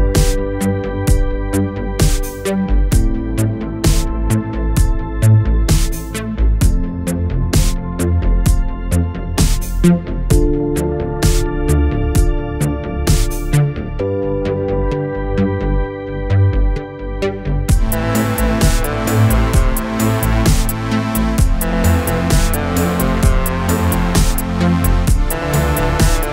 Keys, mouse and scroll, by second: 0.4 click, 1.4-2.5 scroll up 1, 2.6 click, 7.1 s, 8.2 click, 10.7 click, 13.8-14.9 click, 16.2 s, 17.1 click, 17.9 Return, 18.8 click, 22.3-24.9 click.